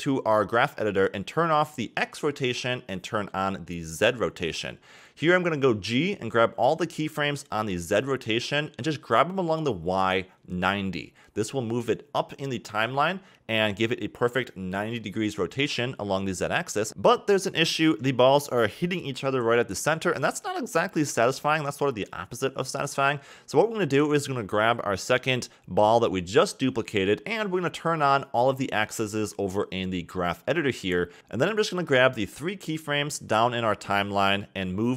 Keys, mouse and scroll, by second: 2.6 click, 4.5 click, 5.1 click, 5.9-6.4 scroll up 7, 6.4 a, 7.2-8.5 scroll up 8, 8.5 g, 10.1-11.2 scroll down 20, 11.2-11.5 middle drag, 11.5-12.1 scroll up 3, 13.1-15.0 middle drag, 15.0-18.0 drag, 18.0 click, 20.9 click, 23.6-24.9 scroll down 2, 24.9-26.2 scroll down 2, 26.3 click, 29.5-31.2 drag, 31.2 a, 34.6 g.